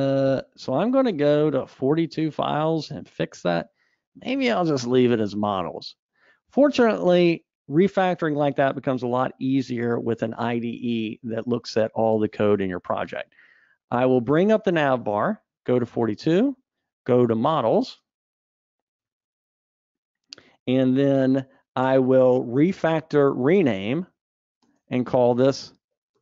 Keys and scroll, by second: 0.9 super+Up, 12.8 Escape, 14.2 super+Up, 21.8 ctrl+alt+t.